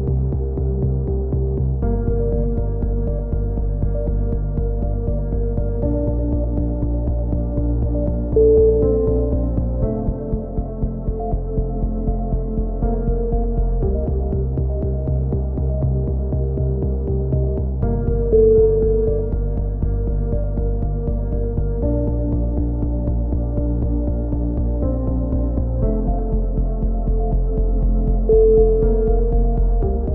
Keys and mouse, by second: 0.1 click, 1.1 z, 1.4 z, 1.8 z, 2.1-4.1 right drag, 3.8 g, 4.4 ctrl+z, 4.9-6.9 typing, 8.2 z, 8.5 click, 9.3 middle click, 12.9 click, 13.4-14.9 right drag, 15.1 x, 15.8 a, 16.0 click, 17.1-19.1 drag, 17.3 right click, 18.3 right click, 18.8 x, 19.6 a, 20.0-21.0 drag, 20.4 x, 21.6 click, 22.8 KP_7, 23.3 z, 23.6-24.8 middle drag, 24.8 z, 24.8 middle click, 25.3 click, 26.2 KP_3, 26.6 z, 27.2 middle click, 27.7 z, 27.9 click, 30.0 KP_7.